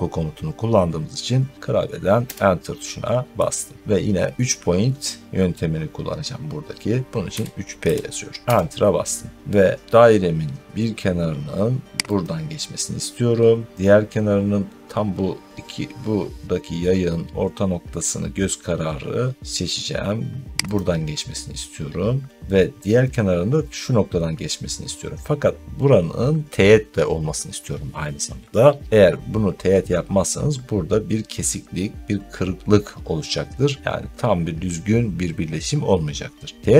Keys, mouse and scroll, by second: 2.1 Return, 7.2-7.7 typing, 8.4 Return, 11.1 typing, 12.1 click, 20.7 click.